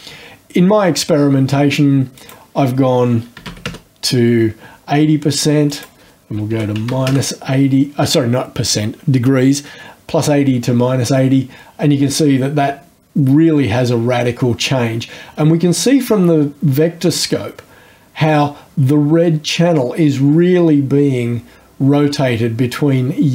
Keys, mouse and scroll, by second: 2.2 right click, 3.4 KP_8, 3.5 KP_0, 3.7 KP_Enter, 5.7 right click, 6.5 KP_Subtract, 6.8 KP_8, 6.9 KP_0, 7.1 KP_Enter, 12.0-23.3 drag.